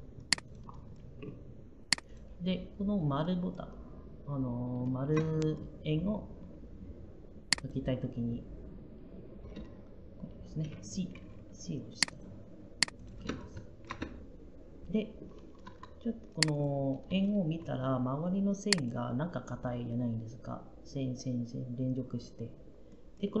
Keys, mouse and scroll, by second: 11.0 c.